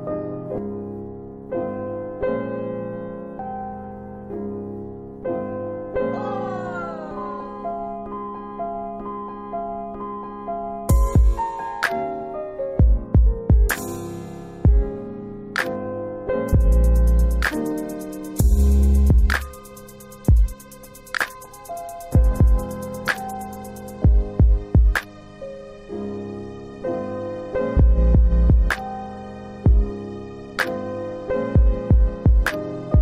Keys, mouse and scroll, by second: 0.3 ctrl+click, 3.4 alt+w, 3.9 alt+w, 6.2 alt+x, 6.6-7.4 scroll up 2, 8.2 click, 11.9 click, 13.5 ctrl+z, 13.9 middle click, 14.6 middle click, 15.7 click, 19.9 alt+w, 20.2 alt+w, 23.6 alt+x, 24.1 middle click, 24.1-24.4 scroll down 2, 24.6 alt+middle click, 25.3 middle click, 27.4 click, 28.1 alt+middle click, 29.6 shift+click, 30.8 w, 31.8 click, 32.9 alt+middle click.